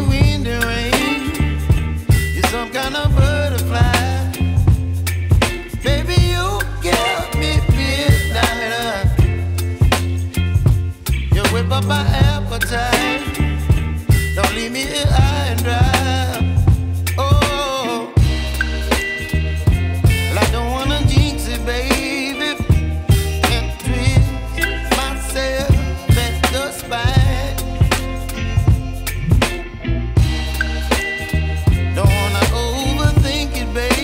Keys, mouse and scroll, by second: 0.0 right click, 0.4 Tab, 2.6 ctrl+shift+click, 12.6 Return, 13.6 click, 13.9 right click, 14.4 Tab, 17.0 scroll down 1, 17.2 right click, 18.0 scroll up 1, 18.1 right click, 18.9 scroll down 1, 19.0 scroll up 1, 19.2 right click, 19.7 scroll up 1, 19.8 right click, 20.0 scroll down 1, 20.1 scroll up 1, 20.3 right click, 20.7 scroll up 1, 21.0 right click, 21.6 scroll down 1, 21.9 right click, 22.2 scroll down 1, 22.4 scroll up 1, 22.6 right click, 23.1-23.4 scroll up 1, 23.4 right click, 24.1 scroll up 1, 24.6 ctrl+shift+click, 25.3 scroll down 1, 25.6 right click, 27.0 Tab, 27.3-28.0 scroll up 1, 28.8 ctrl+r, 30.4 click, 30.8 scroll down 1, 30.9-31.5 scroll up 1, 31.5 click, 32.5 ctrl+j, 33.3 Escape.